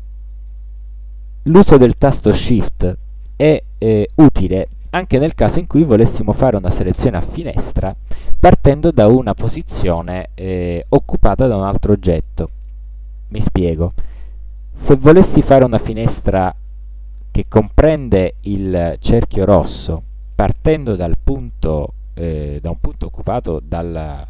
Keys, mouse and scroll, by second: 1.5 click, 16.9-24.2 shift+drag.